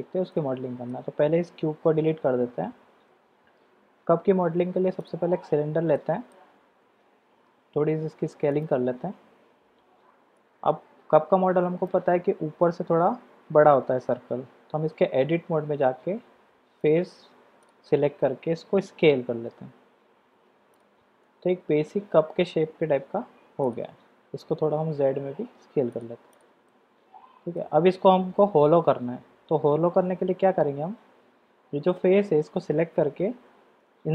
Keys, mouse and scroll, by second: 0.4-1.0 middle drag, 1.8 x, 3.4 shift+a, 6.0 click, 10.4-10.7 shift+drag, 11.7 click, 15.4 Tab, 16.8-18.3 drag, 21.2-22.5 drag, 22.5 middle click, 23.9 Tab, 24.8 s, 26.3 click, 26.7-27.6 middle drag, 30.0 Tab.